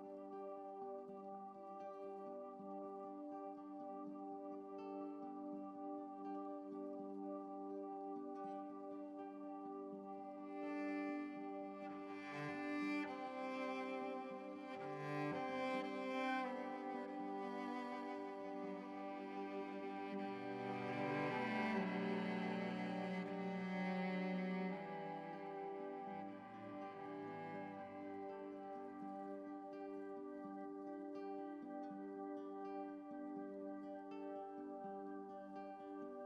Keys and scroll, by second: 31.7 ctrl+z.